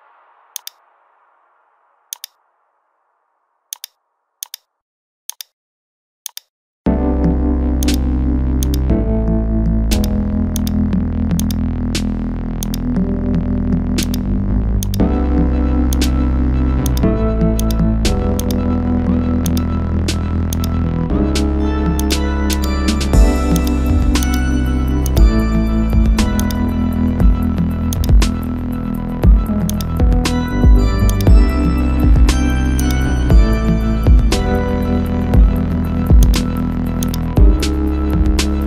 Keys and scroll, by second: 14.4 ctrl+z, 38.4 ctrl+z.